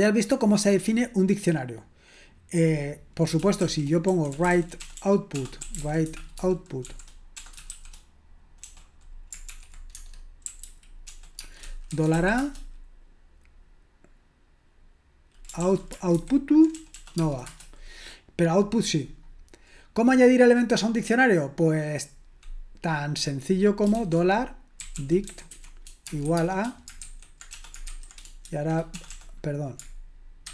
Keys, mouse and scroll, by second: 1.0-2.1 scroll down 1, 2.1-3.6 scroll down 1, 3.4-12.4 typing, 15.6 ctrl+p, 16.1 alt+b, 16.8 BackSpace, 16.9 BackSpace, 17.2 space, 17.5 Return, 24.0-30.5 typing.